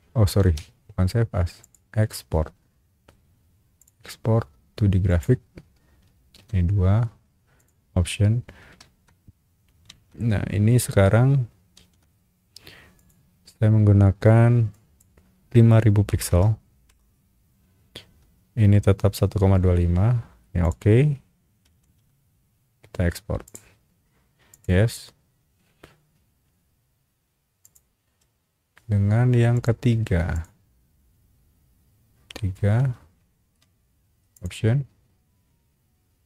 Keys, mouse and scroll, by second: 0.4 Escape, 1.6 click, 3.8 click, 5.1 click, 6.4 2, 7.5 click, 8.8 shift+q, 9.9 shift+w, 11.7 shift+w, 12.9 click, 14.7 click, 16.1 KP_0, 20.6 click, 21.8 shift+q, 23.4 click, 24.5 click, 27.6 click, 29.5 click, 30.3 click, 32.5-33.2 typing, 34.3 click.